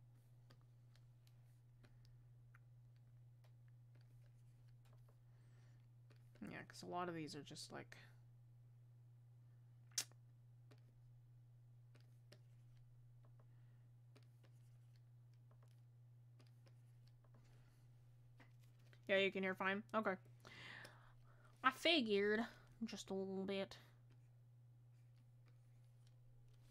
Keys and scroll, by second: 22.0 ctrl+z.